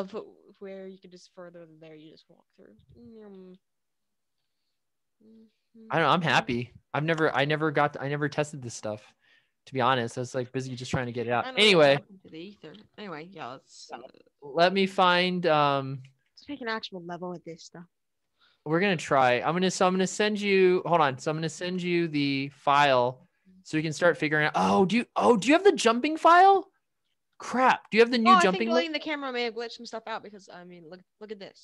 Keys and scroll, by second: 0.5 w, 1.1 s, 2.7 a, 3.3 a, 4.3-5.7 typing, 11.6-12.8 typing, 21.5 a.